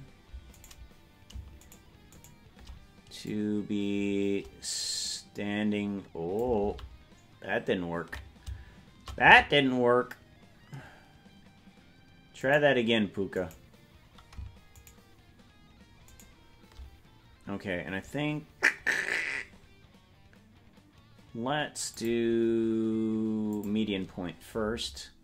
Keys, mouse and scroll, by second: 0.7-1.8 right drag, 3.2-6.5 drag, 7.6 ctrl+z, 12.7 right click, 15.0-21.0 shift+right drag, 21.9-23.7 drag.